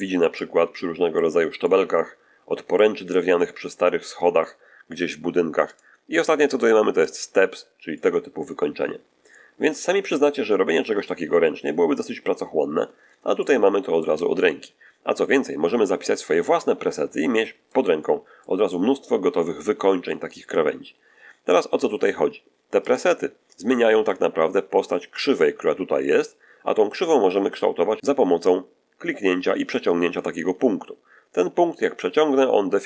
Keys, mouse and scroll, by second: 0.2-1.3 middle drag, 1.5-2.9 middle drag, 3.3-4.5 middle drag, 5.6 click, 6.9 click, 7.8-10.3 middle drag, 10.5 middle click, 12.2-12.5 scroll down 1, 13.3 shift+middle click, 16.1 scroll down 1, 16.9 shift+scroll down 1, 17.1 shift+middle click, 17.9 shift+middle click, 18.6 shift+middle click, 22.7 click, 23.4 click, 28.4-32.1 drag.